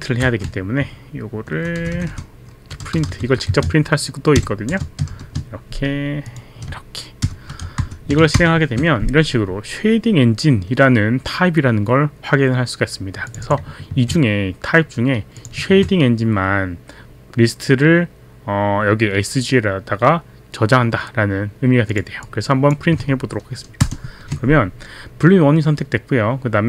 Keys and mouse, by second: 1.8 Left, 2.5-5.6 typing, 6.3 click, 7.3 shift+0, 7.8 shift+Up, 8.8 ctrl+Return, 13.3 click, 13.6 click, 13.9 click, 14.0 ctrl+c, 15.4 click, 15.7 ctrl+v, 21.8 click, 22.3 click, 23.8 ctrl+Return.